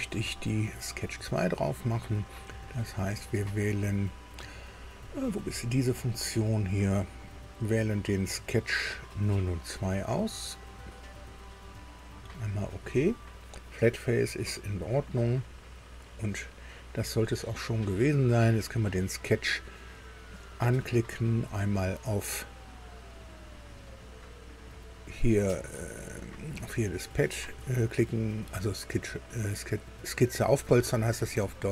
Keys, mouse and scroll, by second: 7.4 click, 11.0 click, 12.4 click, 14.7 click, 18.6 click.